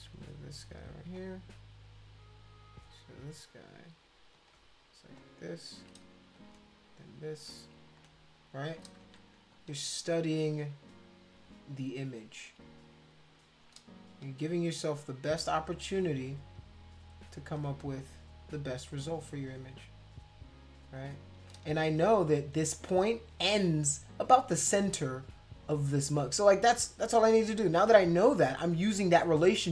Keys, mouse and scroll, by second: 1.2 click, 4.3 click, 5.2 shift+click, 6.4 click, 7.0 shift+click, 7.9 click, 8.3 shift+click, 9.0 ctrl+z, 9.5 click, 9.9 shift+click, 13.2 shift+click, 15.0 click, 15.7 shift+click, 17.6 click, 19.9 shift+click, 21.0 shift+click, 24.0 click, 24.5 click, 25.5 click, 28.2 click, 29.1 click.